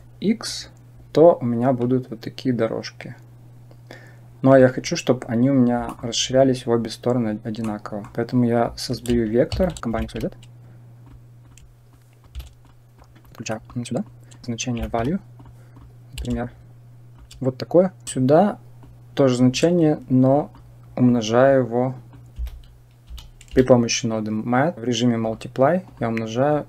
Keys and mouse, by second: 0.3-4.4 drag, 5.8 middle click, 7.5 middle click, 9.4 shift+a, 11.8 click, 12.9 click, 13.4 middle click, 14.0 click, 15.3 click, 16.2 shift+click, 18.7 click, 20.3 click, 22.0-26.6 drag.